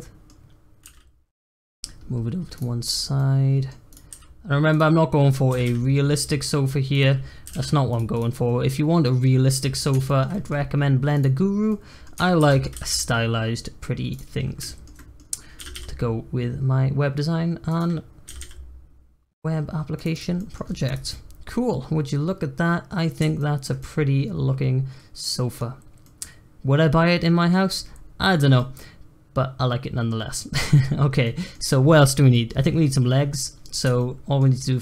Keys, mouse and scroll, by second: 0.4-0.8 scroll down 1, 0.8 g, 1.7-2.1 middle drag, 2.1-2.5 scroll up 1, 2.5 click, 2.8 scroll down 1, 3.1-3.8 middle drag, 3.8 click, 4.1 g, 5.5 r, 7.4 g, 8.1 click, 8.4-10.5 middle drag, 10.5-11.1 scroll down 3, 11.1 click, 11.3 scroll up 1, 11.6 middle click, 12.3 shift+d, 14.3 scroll up 1, 14.6-15.5 shift+middle drag, 15.5 r, 18.2 r, 20.1 drag, 20.3 middle drag, 20.6 scroll down 1, 20.8 click, 21.1-25.6 middle drag, 25.6-26.0 scroll up 1, 26.0-33.6 middle drag, 33.6 scroll up 1, 33.9-34.8 shift+middle drag.